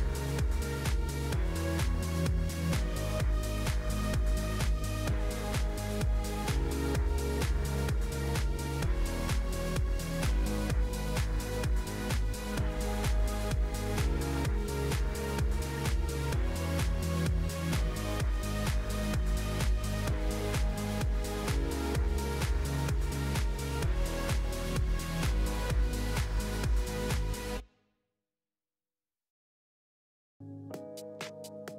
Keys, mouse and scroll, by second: 0.8 click, 2.4 click, 2.7-3.4 scroll up 4, 3.4 g, 9.5 click, 10.4 Tab, 10.9 a, 11.5 p, 15.8 right click, 16.7 Tab, 16.9-19.9 right drag, 19.9-22.3 drag, 22.5-31.7 drag.